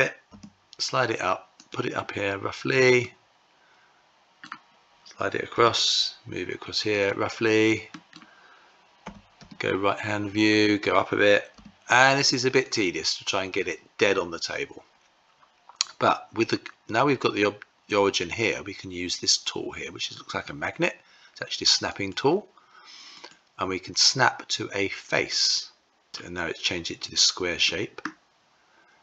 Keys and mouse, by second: 2.5-3.9 middle drag, 5.0 g, 7.4 middle click, 8.9 `, 11.0 g, 21.4 click, 22.7-25.9 drag, 27.1-28.7 middle drag.